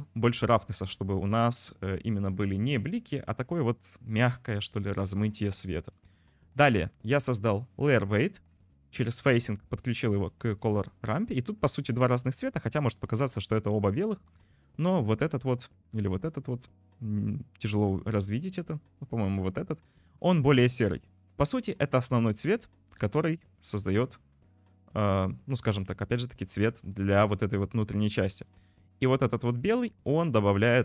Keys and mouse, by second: 6.6 click, 7.4 drag, 8.7 click, 9.4 click, 10.4 click, 12.2 click, 22.0 click, 28.9-30.8 drag.